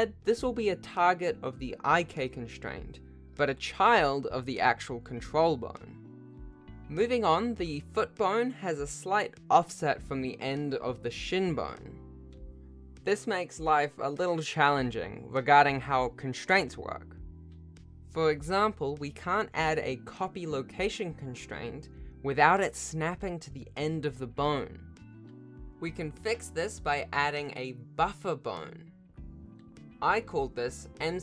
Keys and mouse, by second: 0.0 click, 0.7 shift+click, 3.3 ctrl+alt+shift+a, 6.1 click, 10.2 Tab, 10.9-18.4 drag, 19.3 click, 20.9 ctrl+shift+c, 24.2 click, 26.7 click, 27.6 click, 28.2 Tab, 28.9 e, 29.9 click, 30.3 F2.